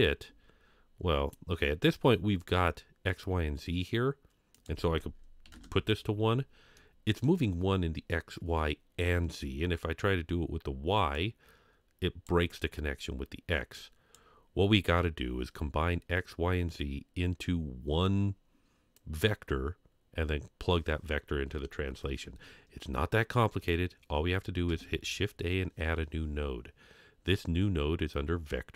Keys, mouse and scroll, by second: 1.9 scroll down 2, 4.5-5.5 drag, 6.7-7.2 middle drag, 11.1-12.3 drag, 13.7-14.2 drag, 24.7 shift+a.